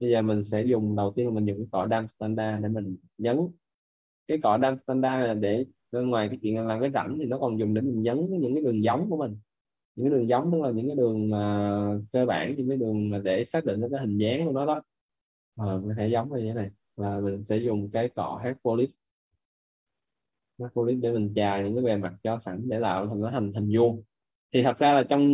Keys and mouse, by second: 0.0 right click, 0.5 b, 1.1 d, 1.5 s, 2.2 alt+click, 4.5 alt+click, 6.5 alt+click, 9.2 right click, 10.3 alt+click, 11.4 alt+click, 12.4 right click, 17.0 b, 18.7 h, 19.2 p, 21.7 right click, 22.5 click.